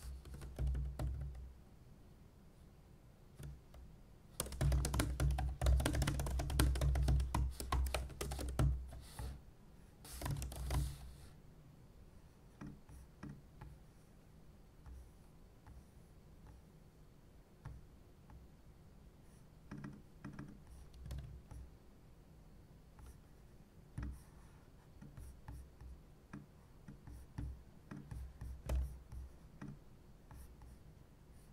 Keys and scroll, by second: 0.4-1.6 typing, 3.4 typing, 4.4-11.2 typing, 17.9-18.6 typing.